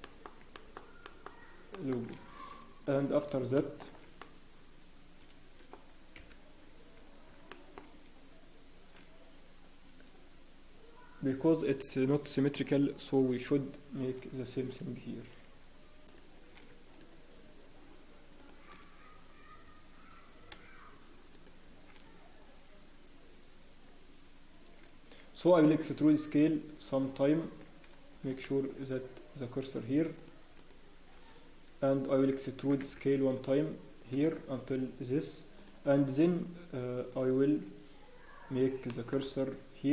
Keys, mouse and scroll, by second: 0.0 shift+middle click, 0.7 shift+middle click, 1.1 shift+middle click, 2.0 shift+middle click, 2.0 shift+scroll up 1, 2.2 scroll down 1, 2.8 alt+click, 3.2 scroll down 5, 3.5 shift+middle click, 4.2 middle click, 6.1 KP_1, 6.5-6.9 scroll down 1, 6.9 scroll up 1, 7.5 shift+middle click, 7.7 scroll down 1, 8.0-10.1 scroll up 3, 15.0 alt+click, 16.0 alt+shift+click, 16.9 shift+click, 18.6 shift+click, 21.3 shift+click, 28.1 scroll up 1, 28.3 shift+scroll down 1, 28.4 shift+middle click, 28.4-29.3 scroll up 4, 30.6 shift+click, 31.2 shift+right click, 31.2-31.8 scroll down 1, 32.6 e, 37.6 shift+click, 38.4 scroll up 1, 38.8 shift+middle click, 39.2-39.5 scroll up 4.